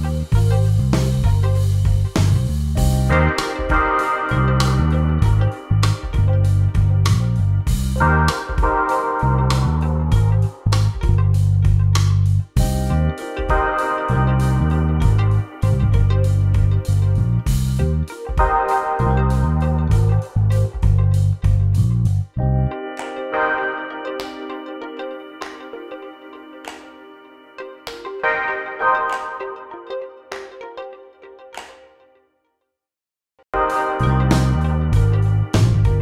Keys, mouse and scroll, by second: 2.2 click, 4.9 click, 9.6 shift+click, 10.8 shift+click, 11.5 shift+click, 12.6 shift+click, 13.2 shift+click, 13.9 click, 19.5 click, 20.6 shift+click, 21.1 shift+click, 21.6 shift+click, 21.8 shift+click, 23.1 shift+click, 23.3 shift+click, 24.4 click, 30.8 click, 34.3 click.